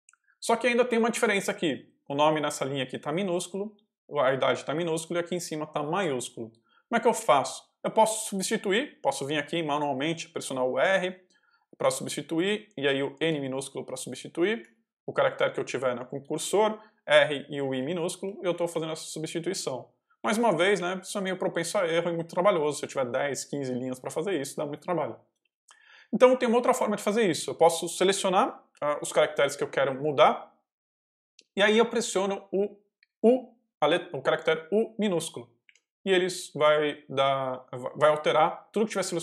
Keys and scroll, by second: 0.6 j, 1.5 h, 2.9-6.6 typing, 11.7 r, 13.1 n, 14.5 j, 16.9-20.1 typing, 27.0 j, 27.3 k, 29.0 ctrl+v, 29.5 ctrl+j, 30.2 j, 35.6 u.